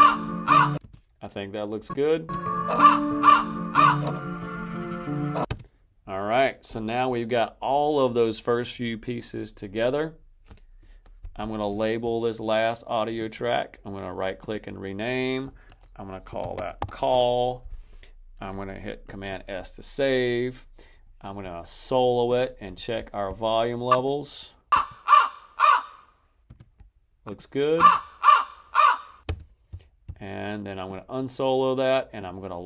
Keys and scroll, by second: 0.7 space, 2.2 space, 5.3 space, 16.2-17.2 typing, 18.9 super+s, 24.6 space, 26.3 space, 27.6 space, 29.1 space.